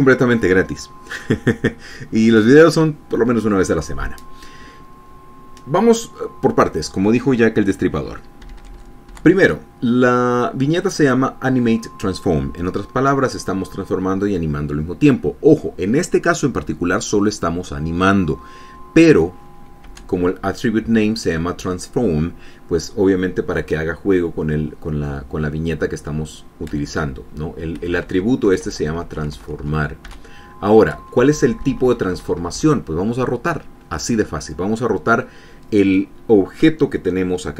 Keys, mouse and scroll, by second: 9.1 Up, 20.5 Down, 28.4 Left, 29.1 Right, 30.7 Down, 31.8 Left.